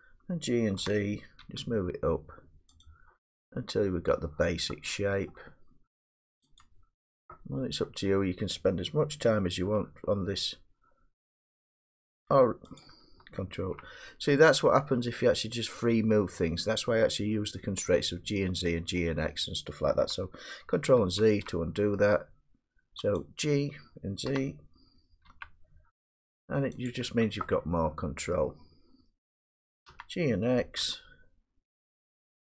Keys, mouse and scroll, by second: 0.8 g, 1.4 g, 2.8 click, 4.2 middle click, 4.7 middle click, 5.3 middle click, 6.6 click, 7.0 middle click, 7.0 scroll down 1, 8.5 middle click, 9.6 g, 12.8-15.2 drag, 16.2-18.8 drag, 18.9 middle click, 21.0 ctrl+z, 23.2 click, 24.3 g, 25.3 z, 26.9 click, 28.3 middle click, 29.9 g, 30.8 g.